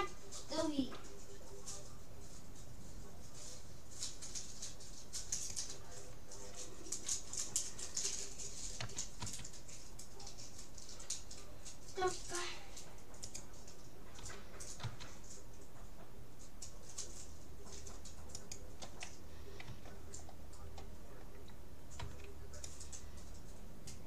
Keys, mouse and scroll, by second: 0.8 g, 8.8 s, 14.2 g, 19.7 a, 20.3-22.3 middle drag, 22.1 c.